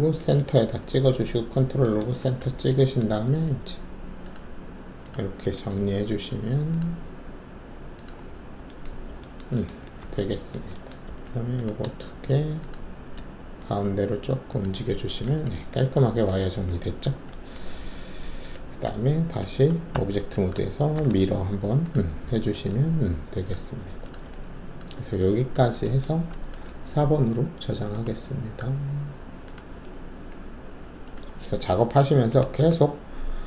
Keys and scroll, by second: 10.0 alt+w, 11.0 alt+2, 15.2 alt+`, 17.7 alt+`, 19.9 ctrl+alt+`, 20.9 ctrl+e, 32.3 Delete, 32.5 4.